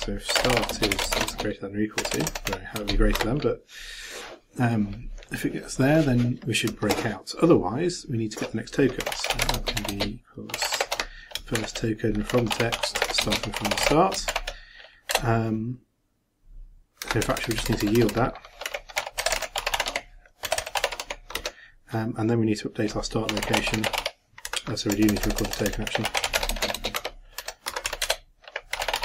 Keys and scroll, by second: 0.9 shift+., 1.0 shift+space, 1.1 shift+=, 1.3 shift+space, 11.5 shift+9, 14.3 shift+0.